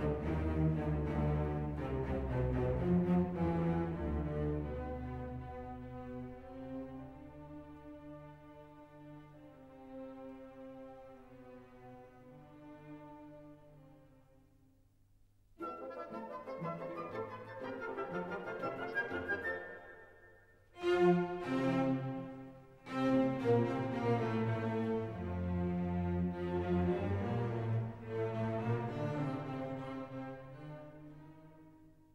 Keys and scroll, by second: 3.5 ctrl+z, 17.3 ctrl+t, 22.3 Return, 32.0 ctrl+z.